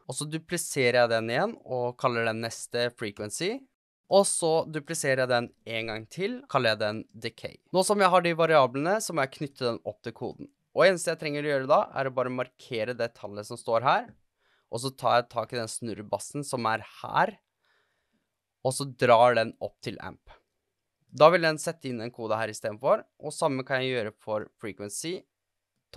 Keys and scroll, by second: 0.0-0.3 typing, 2.0 super+d, 3.1 Return, 3.5-4.4 typing, 5.4 super+d, 7.1-8.0 typing.